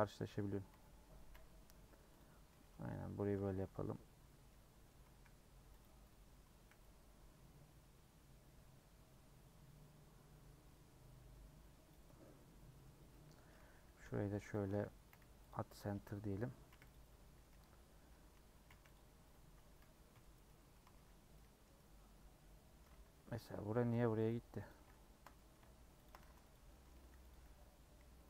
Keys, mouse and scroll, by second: 0.2 middle click, 0.7 alt+z, 1.3 alt+z, 2.2 click, 2.6 2, 2.9 middle click, 3.4 3, 3.7 middle click, 4.0 scroll down 2, 4.4 scroll up 1, 4.5-5.7 middle drag, 5.7 c, 6.8 c, 12.2-14.0 middle drag, 14.0 i, 15.5 m, 15.9 2, 16.8 c, 17.5 3, 18.8 c, 20.1 ;, 20.4 middle click, 20.8 3, 21.3-22.8 middle drag, 22.8 scroll up 2, 23.4 click, 24.3 x, 24.7 click, 25.4 middle click, 26.1 shift+click, 26.5-28.2 typing, 26.7 middle click, 27.3 click.